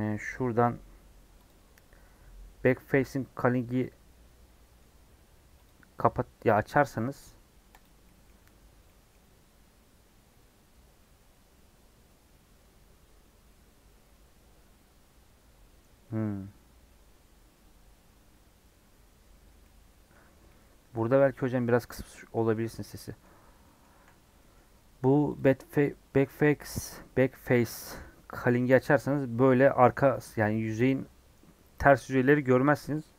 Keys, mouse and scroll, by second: 3.8-7.7 middle drag, 7.7 click, 8.0-20.3 middle drag, 20.3 scroll down 1, 20.4 middle click, 20.9 scroll up 3, 21.1 middle click, 21.6 scroll up 4, 21.9-23.0 scroll down 5, 21.9 middle click, 22.5 middle click, 23.0 middle click, 23.2-23.6 scroll up 6, 23.6 middle click, 23.9 1, 24.2 scroll down 2, 24.3-28.9 middle drag, 28.9-30.9 scroll up 1, 30.9-32.6 scroll up 1, 32.6 Tab, 32.7 scroll down 4, 32.9 middle click.